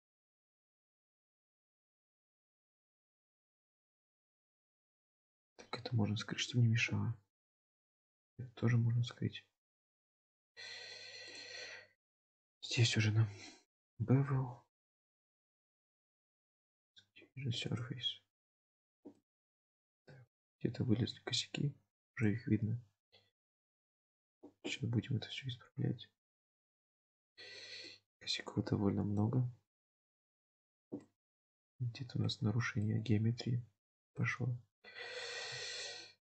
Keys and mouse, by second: 0.9-4.3 middle drag, 6.4 click, 9.9 click, 11.4-14.0 drag, 15.8 drag, 16.4-18.1 drag, 19.2-19.7 middle drag, 20.1 shift+middle drag, 22.2 drag, 23.5 click, 24.7-27.9 middle drag, 29.2-30.8 drag, 31.1-32.3 middle drag, 32.8-34.3 middle drag, 35.4 KP_7.